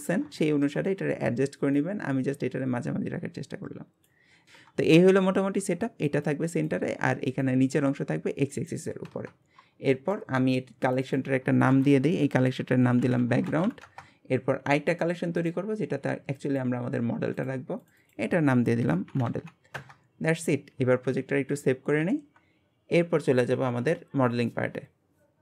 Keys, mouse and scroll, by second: 0.0 scroll up 1, 0.4-0.9 shift+middle drag, 0.9-1.7 scroll up 1, 1.7 click, 4.3 scroll down 1, 4.5-9.3 shift+middle drag, 9.6-9.9 scroll down 1, 9.9 shift+middle click, 10.8 click, 11.0-14.2 drag, 15.4-16.4 drag, 17.3 click, 17.8 click, 18.0-21.0 drag, 22.1 ctrl+s.